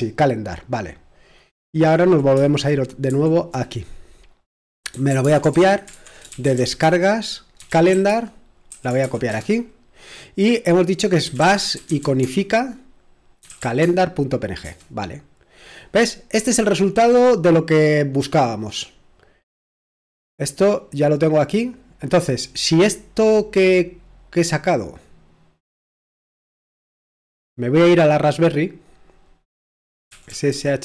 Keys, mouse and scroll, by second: 0.7 click, 3.1 super+7, 4.7-9.5 typing, 11.1-14.6 typing, 16.6-17.3 scroll up 1, 18.9-19.4 scroll down 1, 20.3-20.7 scroll down 1, 20.6-21.9 typing, 23.0-23.7 typing, 23.2-29.8 drag, 24.8-25.6 typing, 29.8-30.8 typing.